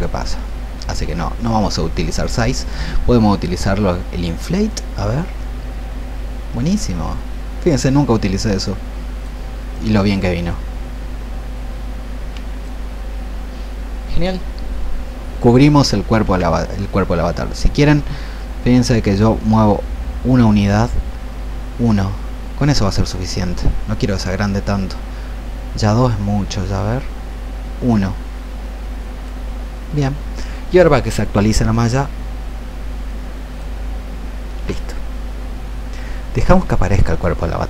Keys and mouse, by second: 1.0 ctrl+z, 4.6-13.5 drag, 16.3 ctrl+z, 18.4-29.6 drag, 32.9 ctrl+click, 34.6-37.6 drag.